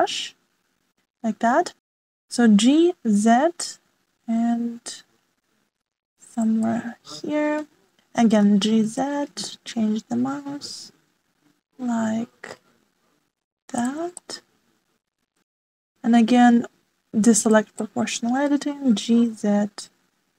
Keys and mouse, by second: 7.6-8.6 middle drag, 9.4 g, 15.1-16.6 middle drag, 18.3 click, 18.7 middle click, 19.8 g.